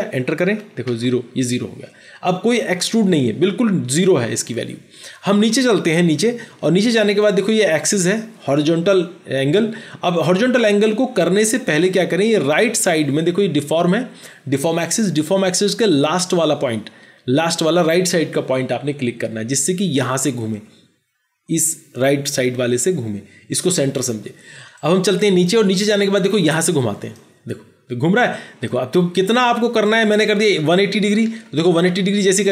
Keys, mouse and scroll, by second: 0.8 Return, 0.8 Return, 30.5 typing, 31.6 Return.